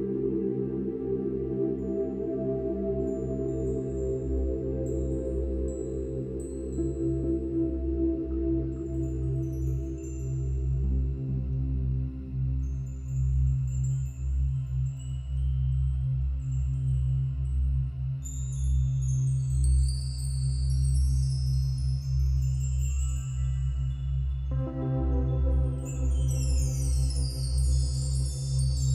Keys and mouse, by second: 0.2 middle click, 0.4 click, 2.7-3.1 typing, 4.8 click, 6.6-7.0 typing, 9.6 click, 11.4 click, 13.3 click, 13.4 typing, 14.1 click, 16.9-18.1 drag, 18.6-19.8 drag, 21.0-22.9 drag, 23.0 space, 23.2-24.8 drag, 24.8 space, 25.1 click, 25.5 space, 26.5 space, 27.1-28.1 drag.